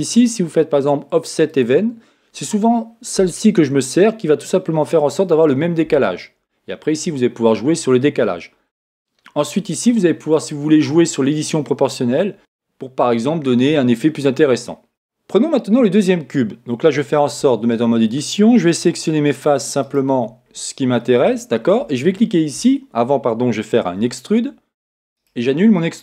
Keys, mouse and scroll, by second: 1.5-3.4 drag, 8.6-10.8 middle drag, 17.4 Tab, 19.8-21.5 right drag, 24.0 e, 25.3-26.0 right drag.